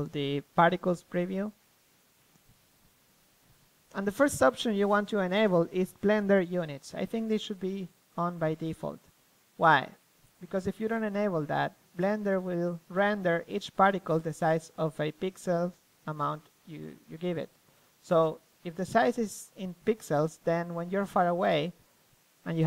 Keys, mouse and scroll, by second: 0.0-1.6 drag, 1.2 a, 4.6-6.3 drag, 7.6-9.4 middle drag, 9.4-10.8 drag, 10.9 click, 13.1 middle click, 13.6 KP_0, 14.6 g, 19.9 click, 20.1 middle click, 20.4-21.6 drag, 21.6-22.6 right drag.